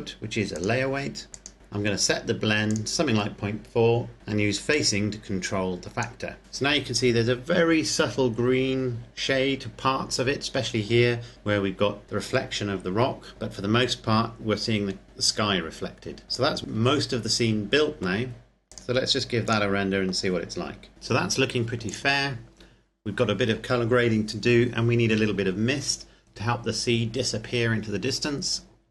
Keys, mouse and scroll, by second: 0.8 click, 3.2 click, 4.9 click, 16.5 click, 19.0 click, 22.1 click.